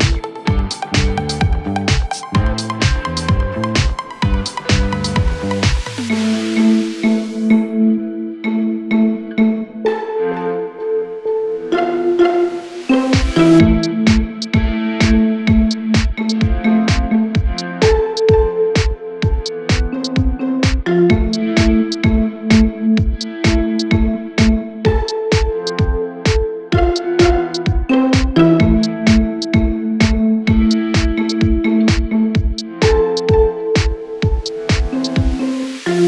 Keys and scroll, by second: 1.2 4, 5.9 3, 8.9 Escape, 15.9 F9, 22.0 f, 27.3 F3, 34.3 Escape.